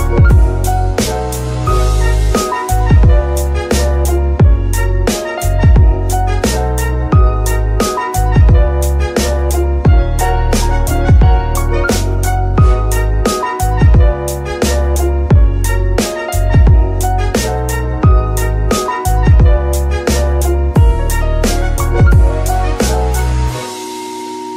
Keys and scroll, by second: 3.5 g, 3.8 Escape, 6.1 g, 6.4 Escape, 7.9 r, 8.4 Escape, 10.0 e, 13.4 Escape, 15.3 r, 15.4 z, 16.8 r, 18.6 r, 18.8 y, 22.9 r, 23.4 Escape.